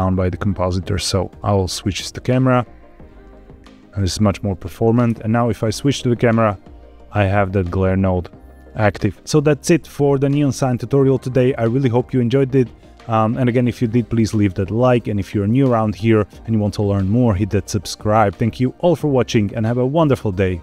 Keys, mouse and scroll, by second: 0.0-1.8 drag, 2.2-4.2 middle drag, 5.2 KP_0, 7.2 scroll up 1.